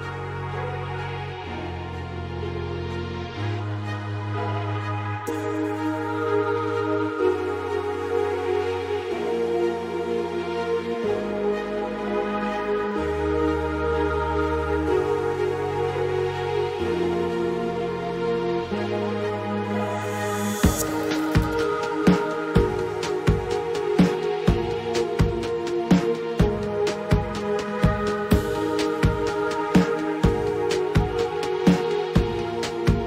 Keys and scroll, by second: 20.8-22.1 typing, 24.5 ., 24.9 2, 25.3 Return.